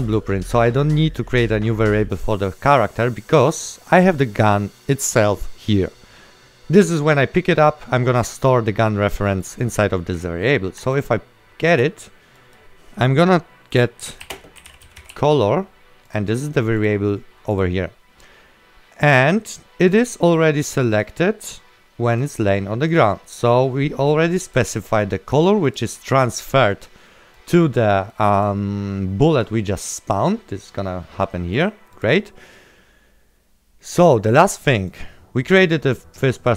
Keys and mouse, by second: 0.1 click, 6.9 right click, 10.1 click, 10.3 right click, 11.1 ctrl+click, 13.8-15.2 typing, 16.9 right click, 16.9 click, 21.0 click, 26.8 right click, 27.5 click, 28.0 right click, 28.5 click, 31.6 click.